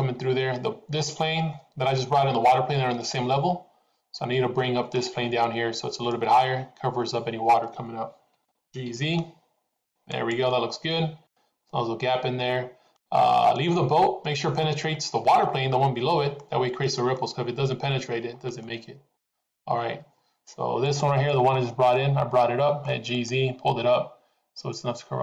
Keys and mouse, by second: 2.0-5.0 middle drag, 6.2 middle drag, 8.7 g, 10.8-13.6 middle drag, 14.3 middle click, 15.4-16.4 middle drag, 16.8 middle click, 18.6 middle click, 20.8 click, 21.9-22.9 middle drag, 23.2 click.